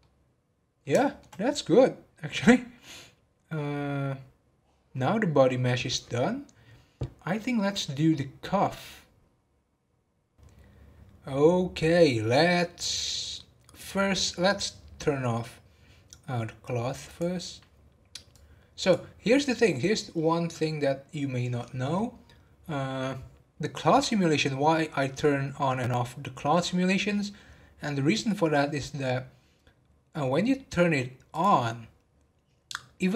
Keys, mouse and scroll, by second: 0.0-4.2 middle drag, 4.8 scroll down 4, 17.0 click, 18.3-19.7 drag, 19.7-22.9 middle drag, 31.3 click.